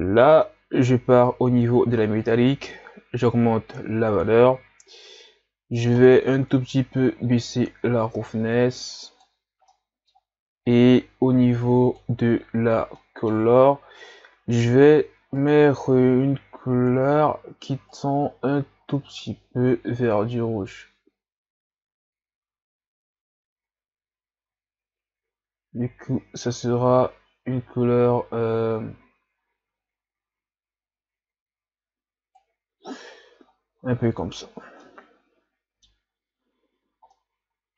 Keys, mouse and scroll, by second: 2.3-13.2 drag, 13.2 middle click, 13.6-15.3 scroll up 5, 17.0 click, 34.1 a, 34.4-34.8 scroll down 5, 34.8-36.1 middle drag, 36.1 scroll up 3, 37.1-37.7 middle drag.